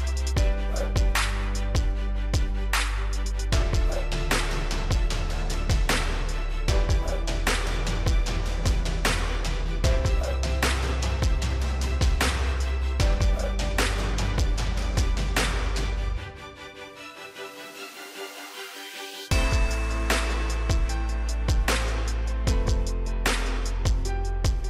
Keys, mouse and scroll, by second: 10.5-14.2 middle drag, 16.8 scroll down 1, 17.1 middle click, 18.3-18.7 scroll up 1, 18.7-19.1 scroll down 1, 19.1-24.6 drag.